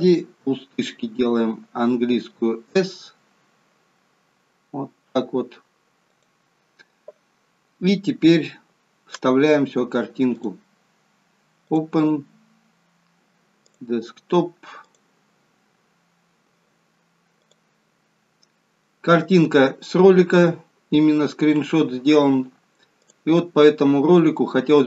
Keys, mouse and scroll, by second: 0.9 s, 10.2 click, 11.6 click, 22.9 click, 24.2 click.